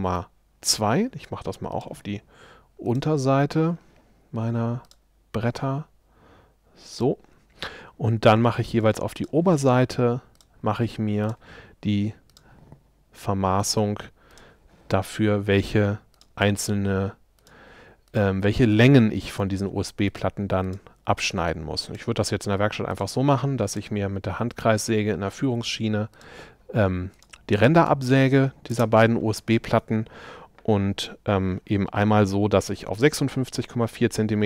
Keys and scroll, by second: 0.7 Escape, 25.5 Escape, 28.8 space.